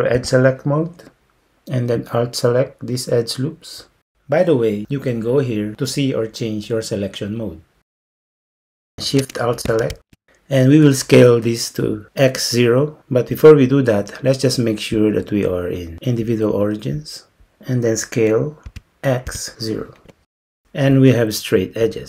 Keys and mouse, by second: 0.2 2, 4.9 alt+click, 15.1-17.1 drag, 18.7 s.